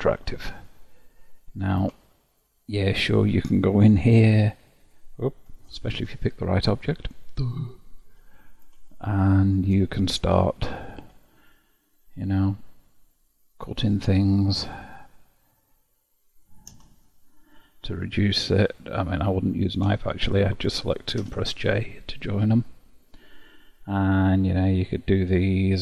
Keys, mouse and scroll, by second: 2.3-3.2 shift+middle drag, 3.2-4.3 scroll up 4, 4.3 Tab, 5.5 Tab, 5.6 click, 6.1 Tab, 8.0 KP_7, 9.1-10.9 shift+middle drag, 10.9 k, 18.9 click, 20.1 shift+drag, 21.2 j, 24.6 drag.